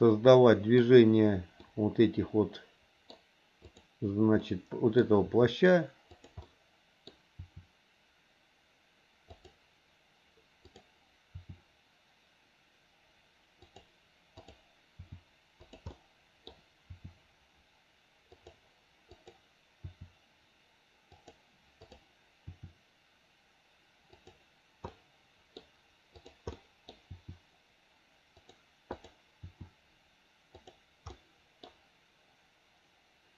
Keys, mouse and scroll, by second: 1.6-3.1 middle drag, 3.6 click, 4.4 middle click, 5.2 r, 6.4 middle click, 7.4 r, 10.6 click, 11.3 r, 14.4 click, 15.0 r, 15.9 middle click, 16.9 r, 19.1 click, 20.4 r, 22.7 r, 24.9 middle click, 26.1 click, 26.5 middle click, 27.1 r, 28.9 click, 29.4 r, 31.1 middle click.